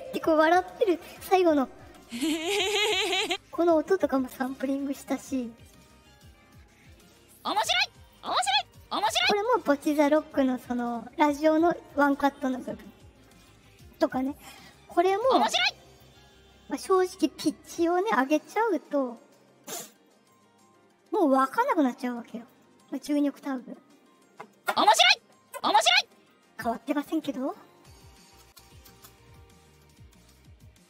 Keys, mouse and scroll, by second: 1.4 click, 7.2 click, 7.9 click, 8.6 click, 15.1 click, 18.4 click, 20.2-22.4 drag, 22.9 click, 28.3 space, 28.8 space, 30.0-30.8 drag.